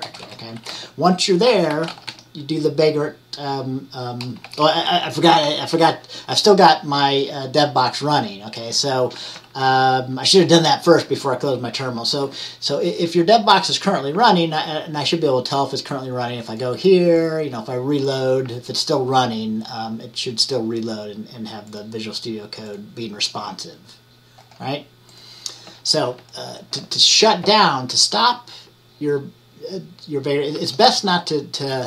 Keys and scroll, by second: 0.1-2.6 typing, 9.3 v, 30.6 a.